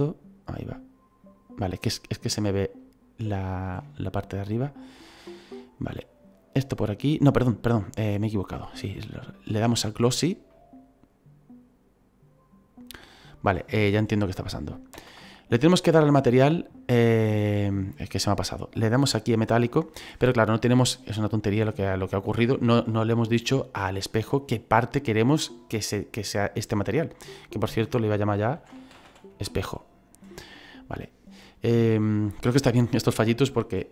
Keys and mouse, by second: 2.6 shift+middle click, 8.7 click, 9.7 click, 14.9 ctrl+z, 27.0 click, 28.6-29.5 typing, 30.4 click, 32.0 shift+middle click.